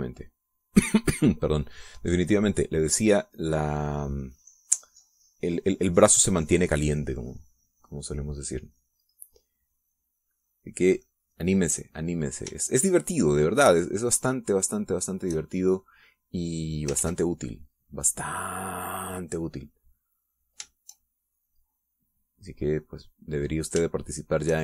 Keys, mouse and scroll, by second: 3.8-11.2 drag, 11.9 middle click, 13.7-16.2 shift+drag, 16.8 click, 17.8 ctrl+z, 20.2-24.4 drag.